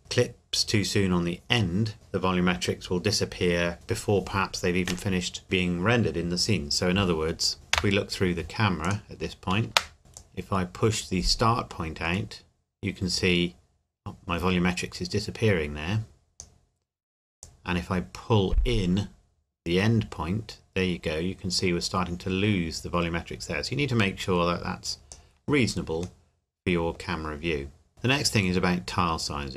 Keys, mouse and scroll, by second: 7.7 KP_0, 8.8 click, 9.7 KP_0, 10.1 click, 26.2 middle click, 27.1 scroll up 1, 27.4 scroll down 1.